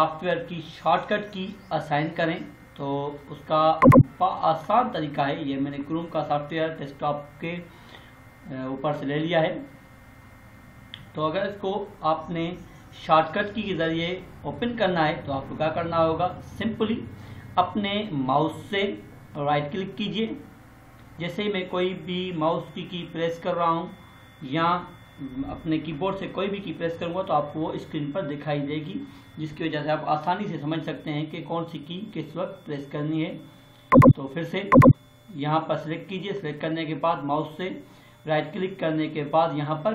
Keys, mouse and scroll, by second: 3.7-7.1 drag, 19.2 right click, 33.8 click, 36.2 right click.